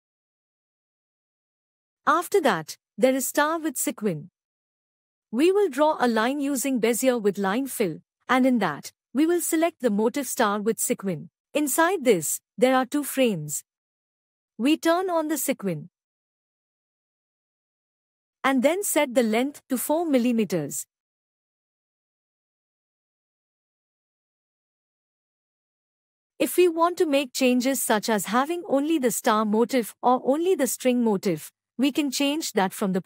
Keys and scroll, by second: 0.5 ctrl+a, 5.0 F6.